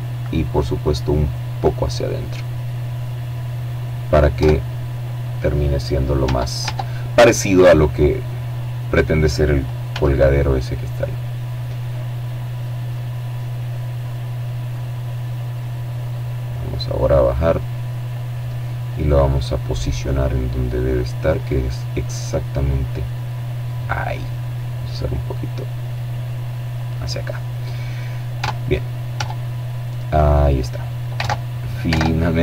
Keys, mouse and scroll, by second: 0.5-2.5 drag, 2.7 Tab, 4.5 Tab, 5.7-6.9 scroll down 2, 6.9-7.8 scroll down 1, 8.2 s, 9.3 click, 9.7 middle click, 9.7 right click, 10.3 middle click, 11.3 click, 12.4-14.3 drag, 13.3-14.3 right drag, 14.5-15.8 drag, 15.9-16.9 drag, 17.3-18.3 middle drag, 18.4-20.1 drag, 23.1-25.5 drag, 26.7 Tab, 27.5 Tab, 28.0-29.6 drag, 29.5 alt+Tab, 30.3 alt+Tab, 31.4 KP_7.